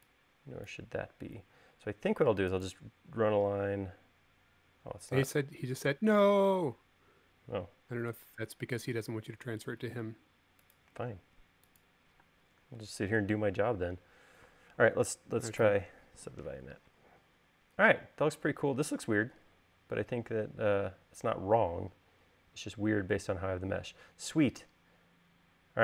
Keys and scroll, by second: 1.5 l, 9.1 l, 12.4 space, 15.7 u.